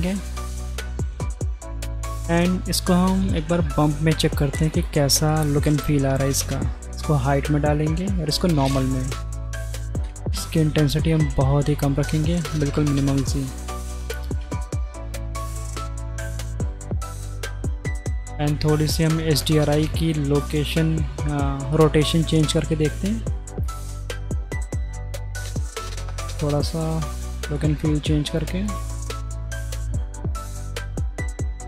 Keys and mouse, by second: 2.2-2.9 drag, 2.9 shift+a, 6.0-7.0 drag, 7.7 click, 8.0 click, 9.6 click, 14.4 n, 15.2 drag, 15.6 n, 20.7-22.0 drag, 22.4 click, 24.2 click, 27.3-28.8 drag, 29.8 click.